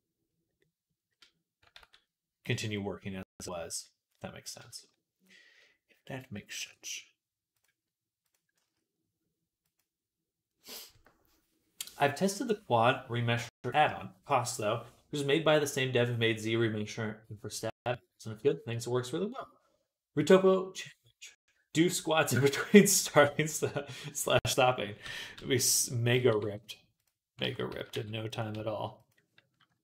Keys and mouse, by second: 1.6 ctrl+s, 6.5 shift+a, 8.5 s, 26.0 s, 27.3 ctrl+z, 27.5 s, 28.4 s, 29.7 KP_1.